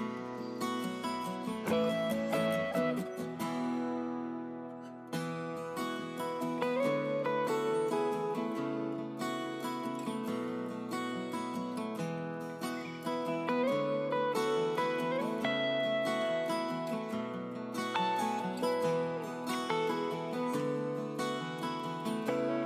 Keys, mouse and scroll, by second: 1.5 click.